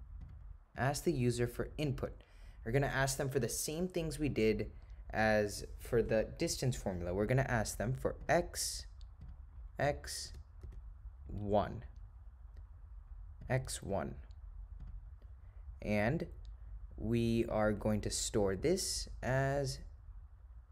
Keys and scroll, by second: 9.3 0, 10.3 7, 13.5 ., 14.0 0, 18.5 ,.